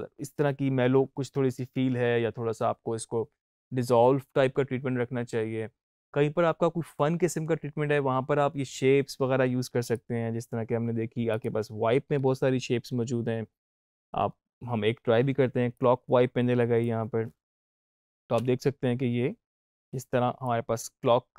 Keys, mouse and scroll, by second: 9.7 click, 12.0-13.9 scroll down 1, 14.1-15.6 scroll down 1, 15.6-17.6 drag, 18.3 space, 20.4-21.3 drag.